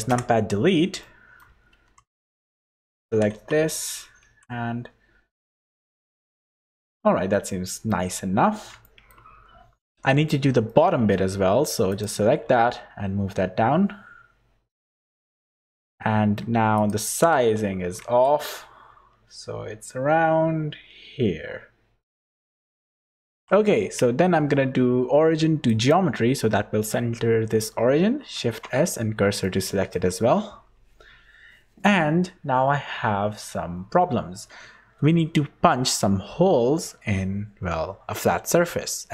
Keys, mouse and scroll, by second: 0.1 KP_Decimal, 1.0 middle click, 1.7 3, 2.2 click, 3.1 g, 6.7 scroll down 4, 7.4 middle click, 8.4 scroll down 2, 8.8 shift+middle click, 10.3 3, 10.6 middle click, 11.3-11.8 scroll up 3, 11.9 click, 12.4 g, 15.7 middle click, 16.4 3, 16.7 click, 17.1 g, 22.6 middle click, 23.3 Tab, 23.8 q, 27.9 shift+s, 29.4 middle click.